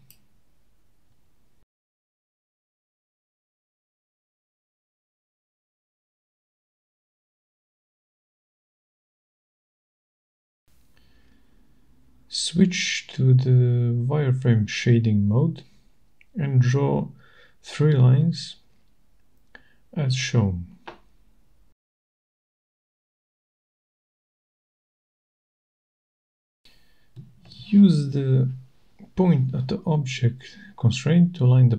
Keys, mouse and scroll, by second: 4.4 click, 5.5-6.5 scroll, 6.9 middle click, 7.2 middle click, 8.3 middle click, 9.7 click, 10.5 click, 10.9-11.5 scroll, 11.5-14.3 scroll, 14.6 middle click, 15.4-16.2 scroll, 17.2 scroll up 9, 17.6 middle click, 17.7-18.1 scroll up 2, 18.1 scroll, 19.1 middle click, 19.9-20.4 scroll, 20.5 scroll, 21.6 click, 22.4 scroll, 23.5 click, 23.7-24.1 scroll, 24.1 click, 25.1 click, 25.5-26.2 scroll, 26.2 click, 26.9 right click.